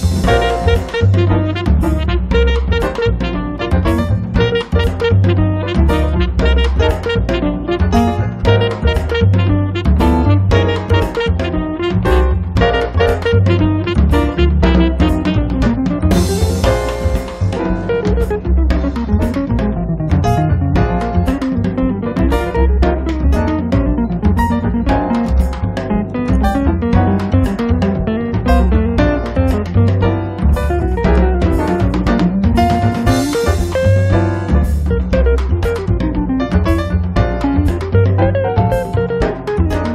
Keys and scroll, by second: 0.0 space, 1.1 Escape, 5.2 space, 8.1 space, 9.0 Escape, 19.2 1, 19.6 0, 26.6 space, 33.0 space, 33.6 Escape.